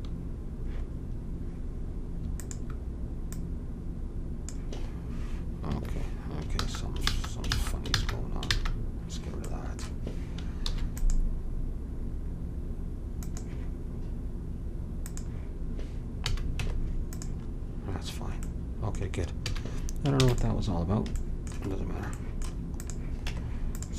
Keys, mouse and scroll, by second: 2.3-5.1 drag, 6.5 ctrl+z, 7.1 ctrl+z, 7.5 ctrl+z, 7.9 ctrl+z, 8.5 ctrl+z, 10.6 ctrl+r, 15.0-16.6 drag, 16.2 a, 16.6 Tab, 19.5 a, 20.2 ctrl+s, 22.8-23.9 drag, 23.2 Tab.